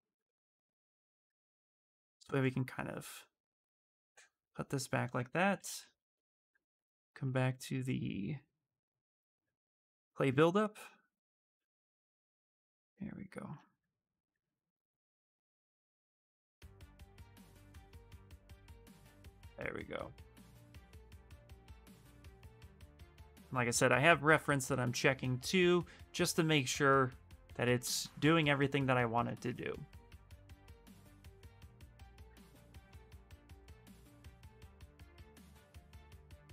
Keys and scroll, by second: 1.0 s, 1.8 s, 5.1-6.4 typing.